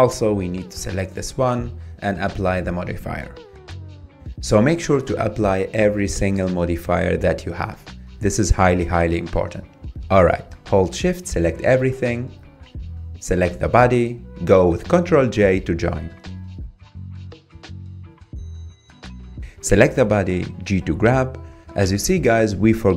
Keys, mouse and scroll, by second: 0.1-1.5 middle drag, 1.5 Tab, 2.5 click, 3.0-3.4 middle drag, 3.4 click, 4.7-6.8 drag, 8.3-10.6 drag, 11.3 shift+click, 12.5 ctrl+j, 13.7 click, 14.1 shift+click, 15.2 ctrl+j, 16.3-16.6 scroll up 5, 16.6-18.3 middle drag, 18.3-19.1 scroll down 9, 19.3 click, 19.8-20.3 middle drag, 20.3 scroll down 1, 20.6 click, 21.5 g.